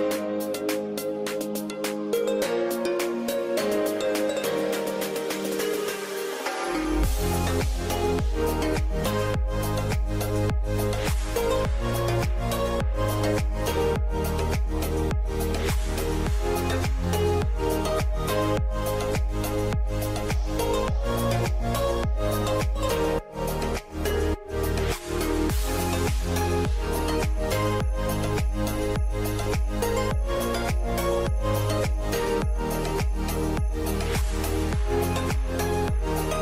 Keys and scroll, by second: 0.7 1, 29.7-32.4 typing, 34.7 typing.